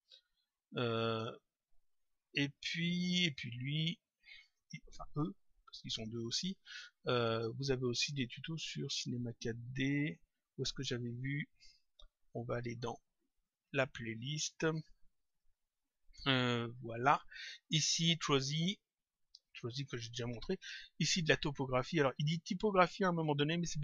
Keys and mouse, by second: 3.3 click, 13.4 click, 15.2 click.